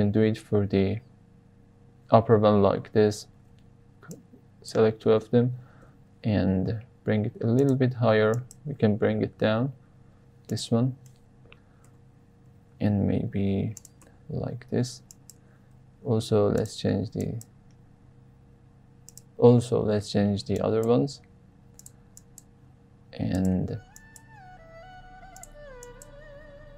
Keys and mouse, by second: 3.4 alt+z, 4.2-4.8 drag, 5.2 alt+z, 5.8 g, 6.0 z, 7.5 drag, 8.3 drag, 9.1 g, 9.3 z, 10.4 click, 10.7 Tab, 11.1 middle click, 11.8 Tab, 12.5 g, 12.7 z, 13.7 click, 14.0 Tab, 14.5 Tab, 15.2 drag, 15.7 g, 16.0 z, 16.5 click, 17.2 click, 18.0 g, 18.0 z, 19.0 drag, 20.5 click, 21.0 g, 21.1 z, 21.8 drag, 22.2 click, 22.5 g, 22.6 z, 23.3 click, 24.0 click, 24.5 g, 24.8 z, 25.3 click, 25.9 click, 26.4 g, 26.5 z.